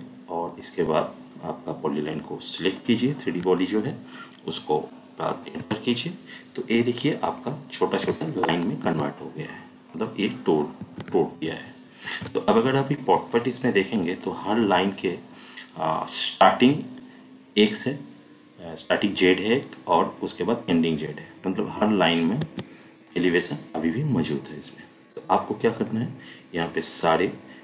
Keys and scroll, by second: 5.6 Return, 8.8 Escape, 10.8 Escape, 12.0 ctrl+1, 22.4 Escape.